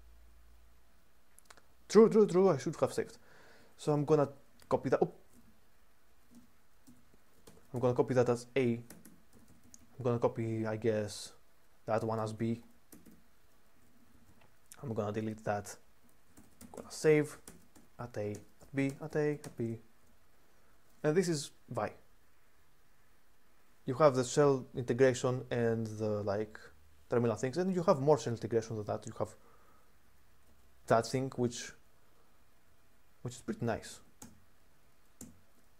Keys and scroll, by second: 2.7 k, 2.8-3.2 k, 4.3 u, 5.1 ctrl+/, 6.1-19.2 typing, 27.6 :, 33.3-34.4 typing, 34.9 Return, 35.5-35.7 typing.